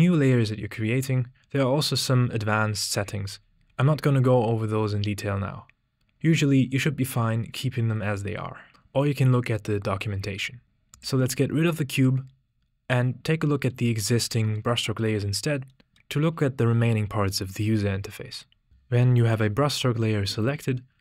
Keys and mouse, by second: 2.0 click, 10.6 x, 14.6-15.0 shift+drag, 15.7 middle click.